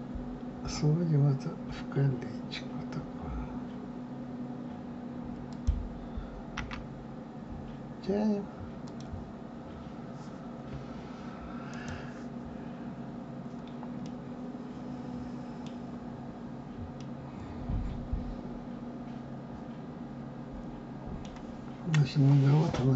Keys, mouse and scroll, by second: 6.6 g, 11.7 click, 14.0-16.0 middle drag, 16.0 scroll down 2, 16.9-20.0 middle drag.